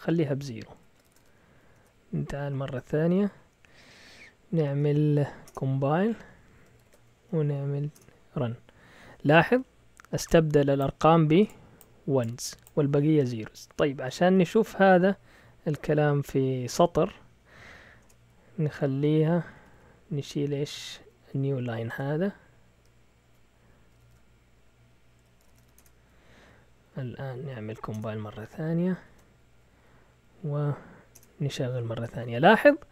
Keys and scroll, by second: 0.7 Escape, 0.8-1.7 typing, 1.7 Return, 2.2 Up, 2.4 Up, 3.0 Up, 3.4 Up, 3.7 Up, 5.4 Return, 6.0 Up, 6.7 ctrl+l, 7.1 Up, 7.4 Up, 7.9 Return, 14.5 Up, 18.0 Return, 18.7-20.7 typing, 21.9 BackSpace, 23.2 Left, 23.9 typing, 25.1 Escape, 25.2-25.9 typing, 26.6 Up, 26.7 Up, 27.3 Up, 27.9 Return, 29.0 ctrl+l, 29.3-30.0 typing, 30.1 Up, 31.1 Return.